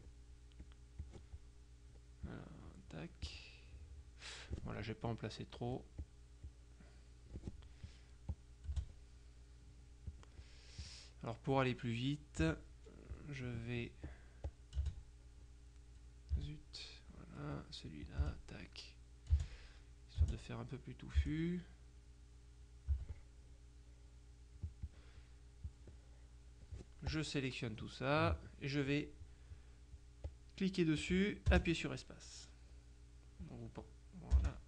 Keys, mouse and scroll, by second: 0.7 click, 2.3 click, 5.2 click, 6.6 click, 8.0 click, 8.8 space, 10.2 click, 10.9 click, 12.5 KP_Subtract, 14.2 click, 14.8 space, 16.4 space, 17.6 click, 18.3 space, 19.4 space, 20.3 space, 21.3 space, 23.0 space, 25.0 click, 25.8-27.2 drag, 28.2 click, 30.4-34.6 drag, 31.6 space, 34.4 space.